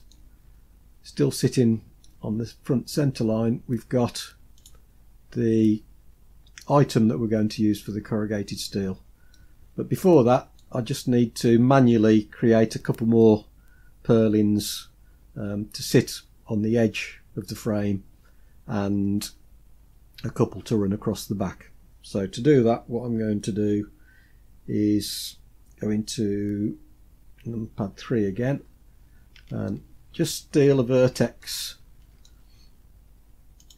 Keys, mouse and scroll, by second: 0.2 scroll up 2, 0.9-1.6 scroll up 1, 1.6 scroll up 1, 1.9-2.8 shift+middle drag, 4.5 click, 8.4-9.2 scroll down 4, 9.2-10.5 middle drag, 11.3-12.0 scroll up 3, 27.3 KP_3, 28.2-29.5 scroll up 6, 29.5-30.3 shift+middle drag, 30.5-31.0 scroll up 3, 31.3-32.1 shift+middle drag, 32.4 scroll up 3, 33.4 click.